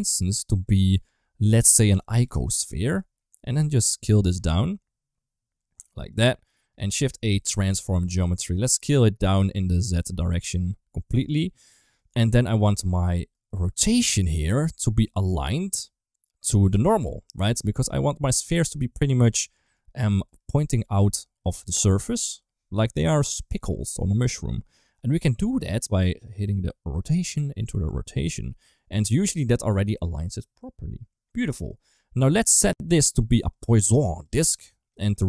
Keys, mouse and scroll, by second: 0.1-2.9 drag, 4.0-6.0 shift+drag, 6.6 click, 6.8 shift+a, 8.7 middle click, 9.5-11.2 drag, 12.0 middle click, 13.1 middle click, 13.4 middle drag, 13.7-14.1 drag, 14.1 g, 15.3 middle click, 17.3 click, 18.4-19.3 middle drag, 19.6 middle click, 20.2 middle click, 20.7 d, 20.8 click, 21.3 d, 21.8 ctrl+z, 26.1 click, 27.1-27.8 drag, 28.7 middle click, 31.3 middle click, 32.0 middle click, 32.6 click, 34.0 click.